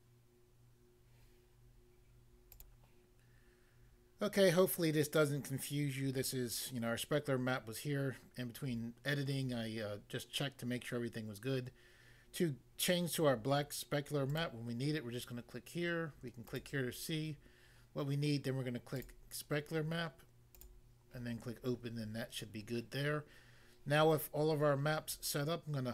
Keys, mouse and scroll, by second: 2.5 click, 2.7 click, 14.3 click, 16.5 click, 19.0 click, 20.6 click.